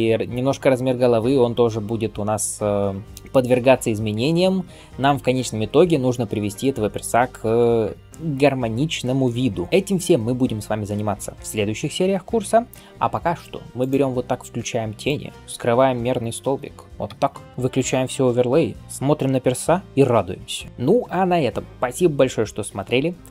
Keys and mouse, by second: 13.6-15.7 drag, 15.7 middle click, 16.4 click, 16.5-19.9 middle drag, 16.9 h, 17.4 alt+shift+z, 18.8 KP_1, 20.7 click, 20.7-23.3 middle drag, 20.7 right click, 23.1 alt+KP_0.